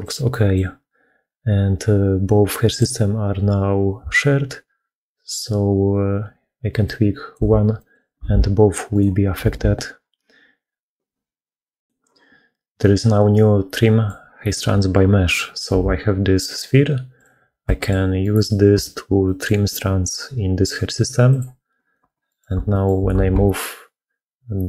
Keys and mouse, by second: 0.1 middle click, 4.0-7.2 shift+middle drag, 7.6 middle click, 8.1 alt+a, 9.3 alt+a, 13.2 middle click, 15.4 ctrl+shift+h, 17.5 middle click, 18.1 click, 19.1 middle click, 21.3 click, 22.6 click, 23.0 g, 23.3 z.